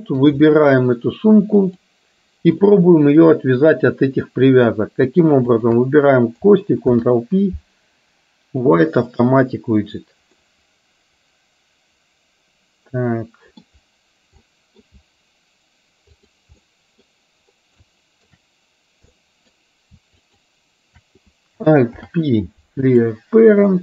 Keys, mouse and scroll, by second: 0.0-0.3 middle drag, 1.7 click, 2.7-3.3 middle drag, 5.5 shift+click, 7.0 ctrl+p, 10.6-13.7 middle drag, 14.6 middle drag, 16.7-17.1 middle drag, 18.0-18.3 shift+middle drag, 19.2-19.6 middle drag, 20.3 shift+click, 22.1 alt+p, 23.7-23.8 middle drag.